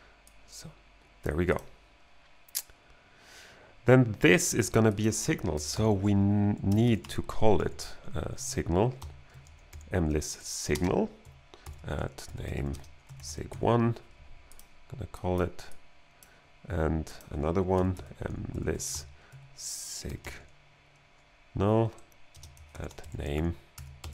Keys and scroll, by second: 5.4-10.7 typing, 10.3 Right, 11.6 alt+g, 12.1-14.0 typing, 17.5-20.7 typing, 21.9 Right, 22.3-24.1 typing, 22.7 alt+g.